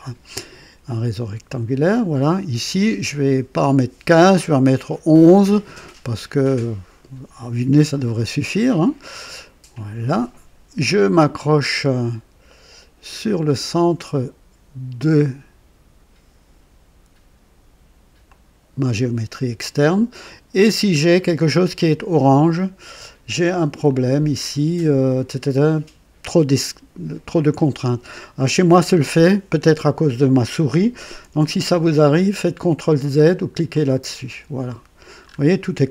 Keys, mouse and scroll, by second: 1.5 click, 9.7 click, 18.3 click, 20.6-21.0 scroll down 2, 21.2-22.6 right drag, 23.9 click, 33.7 click, 35.2-35.6 scroll up 2.